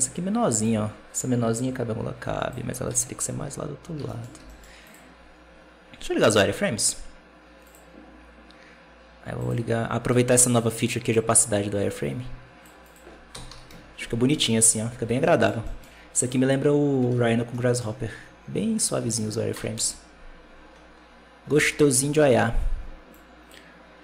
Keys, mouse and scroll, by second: 2.8 KP_7, 3.2-3.9 scroll down 10, 3.9 shift+middle drag, 4.2 g, 5.0-6.1 scroll up 1, 6.1-9.1 drag, 9.3-12.4 drag, 14.2 scroll down 1, 14.4 middle click, 14.7 scroll up 3, 15.0 alt+a, 15.1-15.7 middle drag, 15.7-16.2 scroll up 2, 16.2 right click, 17.0 alt+a, 17.2 scroll down 4, 17.4-18.1 middle drag, 18.1-18.6 scroll up 4, 19.0 right click, 19.6 KP_0, 20.2-21.4 scroll up 10, 21.4 g, 22.0-22.8 scroll down 6, 23.0-24.0 drag.